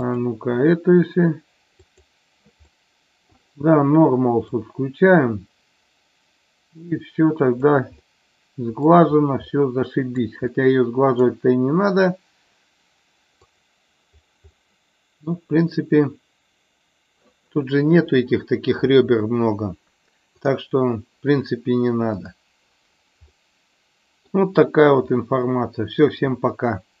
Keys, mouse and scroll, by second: 0.1 click, 1.9 click, 2.6 middle click, 4.6-7.7 drag, 7.9-8.9 middle drag, 9.4 middle click, 10.4 middle click, 14.4-15.2 middle drag, 20.3 click, 22.2 click, 23.3-24.3 middle drag, 25.1-25.9 middle drag.